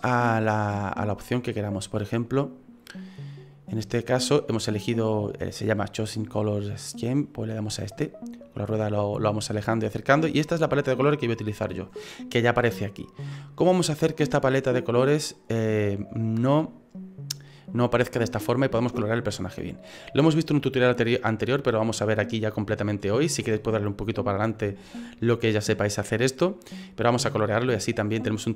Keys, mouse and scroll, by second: 2.3 click, 7.9-8.4 scroll down 2, 8.4 scroll down 1, 8.7-9.1 scroll down 4, 9.0 scroll up 3, 9.3 scroll down 2, 9.6 scroll up 2, 9.7-11.9 scroll down 1, 19.0 middle click, 25.5 middle click.